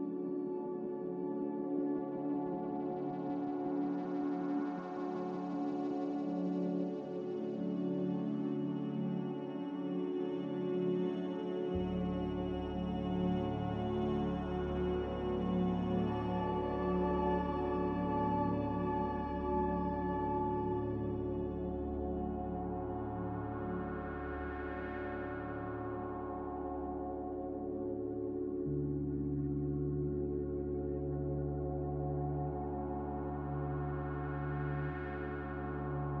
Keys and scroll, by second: 7.0 z, 16.6 5, 18.7 2, 25.5 5, 29.9 a.